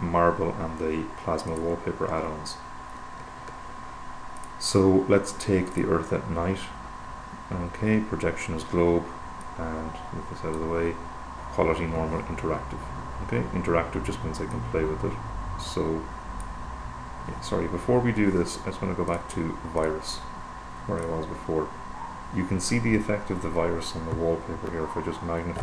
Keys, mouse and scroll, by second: 4.9 click, 6.2 click, 9.9-11.5 drag, 14.0-17.4 drag, 19.5 click, 20.2 click, 21.4 click, 25.0 =.